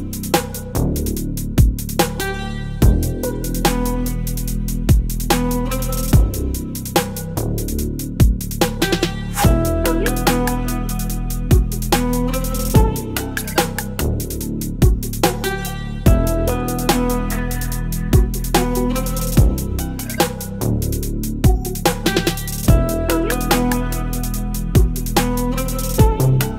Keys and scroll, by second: 0.2 space, 0.4 v, 0.7 space, 1.6 Delete, 1.8 space, 2.3 space, 3.1 space, 3.7 v, 6.0 ctrl+BackSpace, 6.2 ctrl+d, 6.3 space, 7.1 space, 8.4 ctrl+v, 8.4 ctrl+t, 10.5 Return, 10.9 space, 12.3 space, 13.1 ctrl+BackSpace, 14.1 ctrl+BackSpace, 14.9 ctrl+BackSpace, 15.4 space, 17.9 ctrl+BackSpace, 18.2 space, 19.2 ctrl+BackSpace, 19.7 space, 21.3 ctrl+BackSpace, 21.5 space, 23.8 ctrl+BackSpace, 24.0 space, 24.8 space, 25.5 v, 25.6 space.